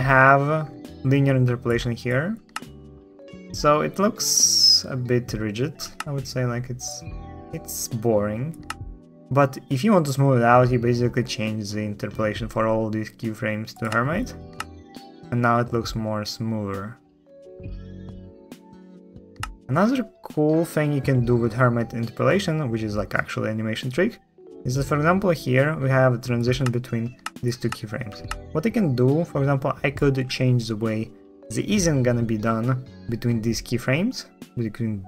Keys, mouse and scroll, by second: 2.3 shift+space, 5.7 space, 14.3 space, 19.1 space, 26.4 space, 27.0 space, 27.5 space, 28.0 space.